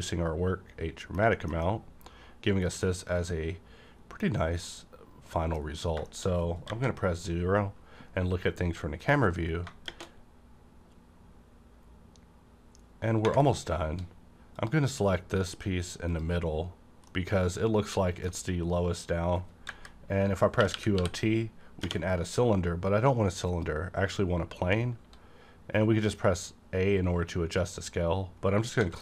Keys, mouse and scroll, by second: 1.5 scroll down 1, 1.6-6.1 middle drag, 6.1 shift+middle click, 6.7 KP_0, 7.5 scroll down 1, 9.0 click, 9.4 scroll down 1, 10.4 scroll up 1, 14.6 click, 16.1 click, 17.1-20.6 middle drag, 19.7-21.8 typing, 23.5 click, 25.0 s, 27.6 click, 27.6 s, 28.5-28.8 scroll down 1, 28.8 s.